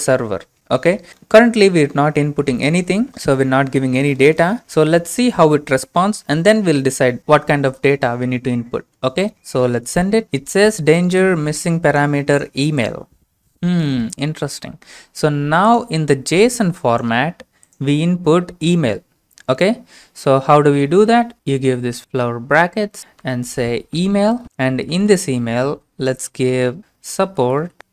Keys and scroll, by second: 26.7-27.9 typing.